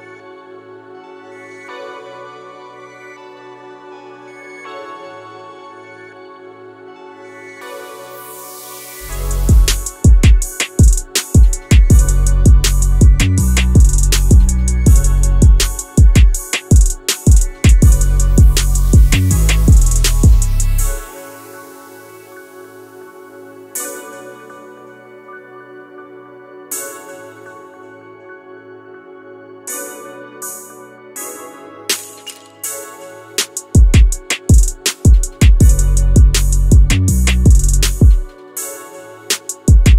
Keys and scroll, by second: 3.7 q, 8.6 2, 9.0 7, 9.1 Return, 12.9 Return, 15.8 1, 15.9 0, 15.9 Return, 20.2 2, 21.5 Return, 22.3 1, 22.4 Return, 38.0 Return, 39.0 Return, 39.4 q, 39.8 q.